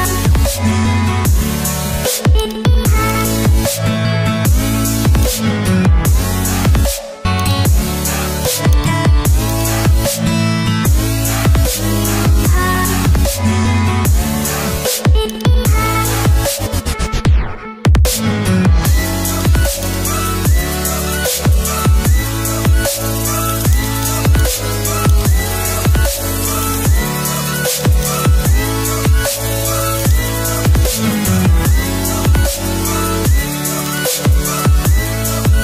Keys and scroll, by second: 16.3 ctrl+i.